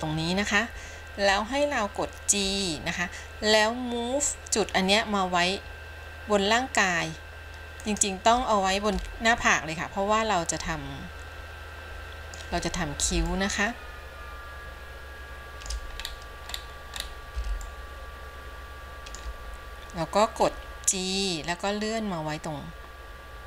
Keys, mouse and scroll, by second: 9.6-13.3 shift+middle drag, 14.3-16.4 shift+middle drag, 16.4-17.9 scroll up 6, 17.9-19.5 shift+middle drag, 21.1 g.